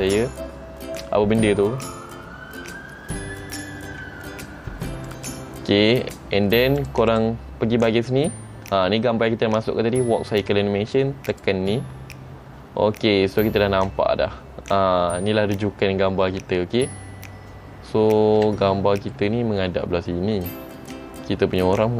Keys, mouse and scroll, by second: 5.3 click, 7.2 click, 12.4-13.6 scroll down 2, 17.8-18.5 scroll up 5, 18.6 shift+middle click.